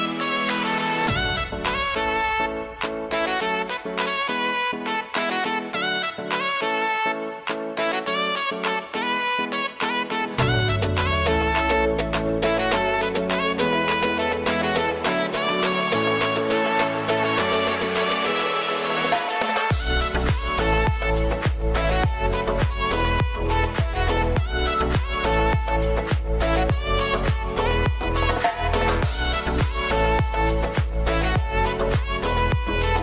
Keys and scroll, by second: 3.7 ctrl+z, 7.8 ctrl+alt+z, 21.6 ctrl+space.